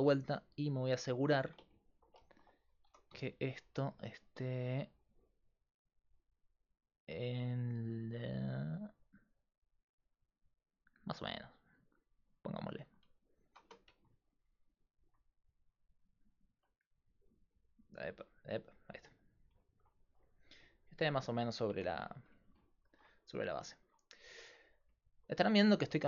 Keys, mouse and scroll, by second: 0.7 KP_5, 3.5-4.7 middle drag, 3.5 g, 13.7 Tab, 18.5-20.4 drag, 20.4 middle click, 21.8 KP_5.